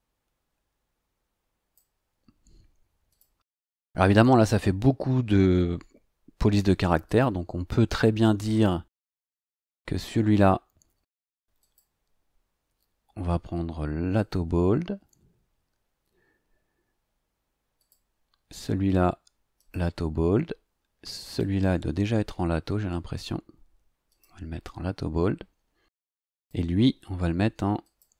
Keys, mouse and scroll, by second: 3.1 click, 7.0 click, 11.6 click, 14.1 click, 17.8 click, 19.6 click, 21.2 click, 24.1 click, 26.3 click, 27.8 click.